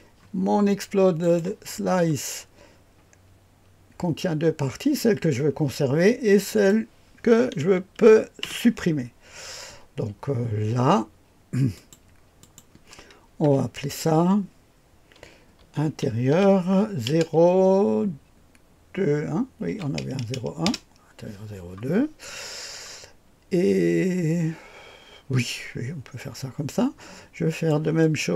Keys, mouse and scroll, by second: 0.0-1.2 scroll down 1, 1.2 click, 1.6-4.4 scroll down 1, 6.4 click, 8.4 Delete, 11.7-13.1 drag, 13.4 F2, 15.3-17.0 typing, 19.7 KP_2, 20.6 Return, 27.5-28.3 drag.